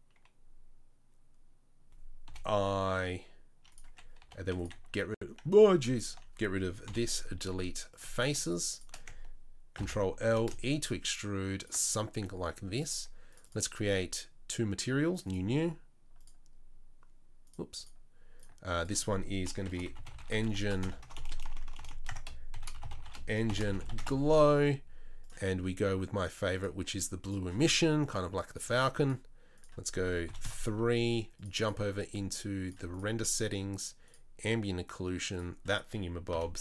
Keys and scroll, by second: 2.3 i, 4.2 3, 4.6 x, 5.5 ctrl+z, 6.8 Delete, 9.7 ctrl+l, 10.2 e, 21.0-21.8 typing, 36.3 n.